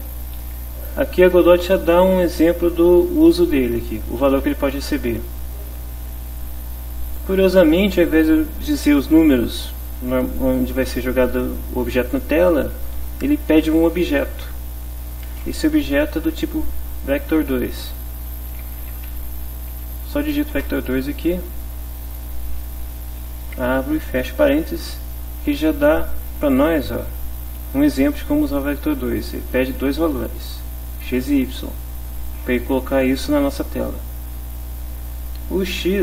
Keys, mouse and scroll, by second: 15.3 space, 15.9 Left, 18.6-19.8 typing, 20.6 Return, 22.6 shift+9, 35.7 Right.